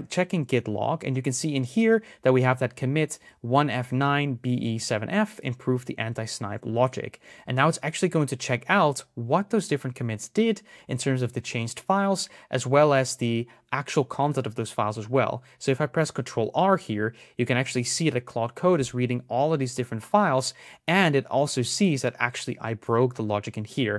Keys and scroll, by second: 16.0 ctrl+r.